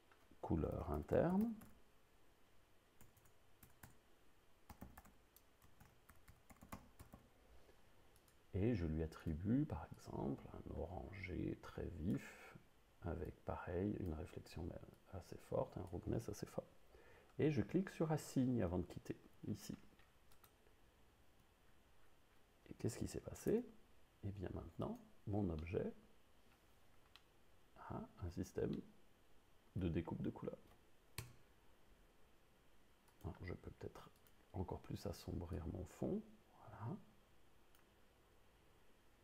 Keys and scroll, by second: 1.0-1.7 typing, 3.0 u, 3.1 BackSpace, 4.8-7.2 typing, 23.7 Tab, 31.2 0.